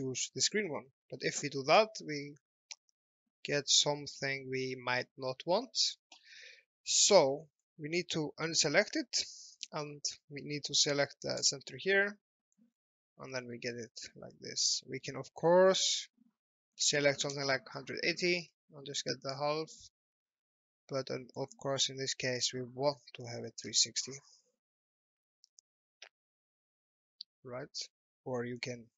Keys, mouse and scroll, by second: 1.2 middle click, 1.7 middle click, 5.1 shift+middle click, 5.7 alt+middle click, 7.6 click, 11.5 click, 12.4 alt+middle click, 12.7-13.2 scroll down 1, 13.3 alt+middle click, 13.9 shift+middle click, 15.5 middle click, 17.0 KP_1, 17.1 KP_8, 17.3 KP_0, 18.6 middle click, 23.2 KP_3, 23.6 KP_6, 25.0 alt+middle click, 25.5 shift+middle click, 28.5 click.